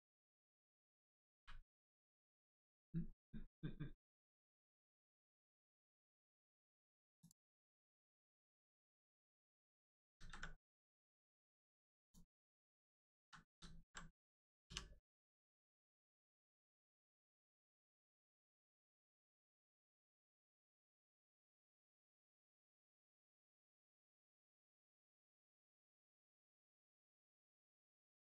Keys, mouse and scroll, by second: 6.1 click, 7.5 middle click, 8.0 scroll up 1, 8.7 middle click, 10.1 ctrl+z, 10.5 middle click, 10.8 scroll down 1, 12.0 click, 12.4-12.9 scroll up 1, 13.1 ctrl+z, 13.4 ctrl+z, 14.6 z, 18.5 right click, 19.7 click, 28.2 click.